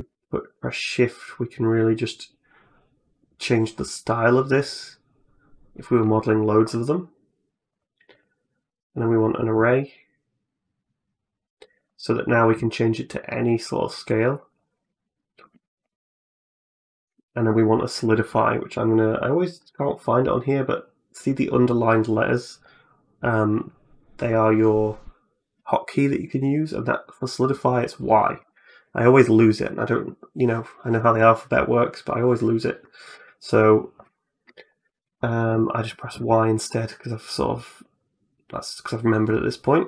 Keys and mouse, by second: 0.0-5.7 shift+drag, 7.6 click, 8.0 click, 11.6 click, 12.4 middle click, 13.9 click, 14.0 click, 14.2 click, 14.4 click, 14.7 middle click, 15.4 shift+middle click, 15.7 middle click, 16.9-33.0 drag, 34.0 middle click, 36.9-39.8 drag.